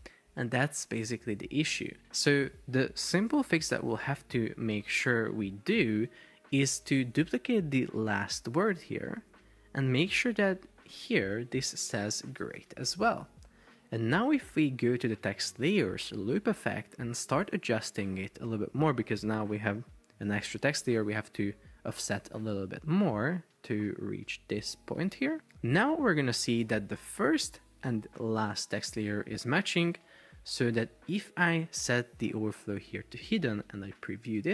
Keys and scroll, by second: 9.4 super+d, 11.4 super+BackSpace, 11.7-13.3 typing, 34.1 super+p.